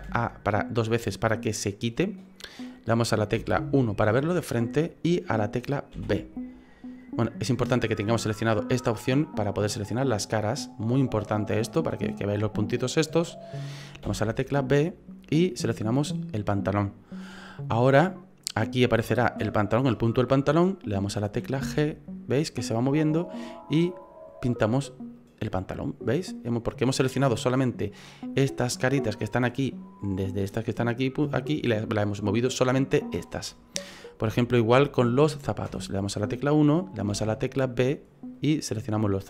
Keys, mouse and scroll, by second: 0.0 a, 3.4 KP_1, 5.9 b, 9.1 click, 14.0 b, 21.6 g, 25.7 middle click, 26.3 right click, 26.6 middle click, 27.6 middle click, 33.4 middle click, 34.0 scroll up 2, 34.3 shift+middle click, 35.7 KP_1, 37.1 b.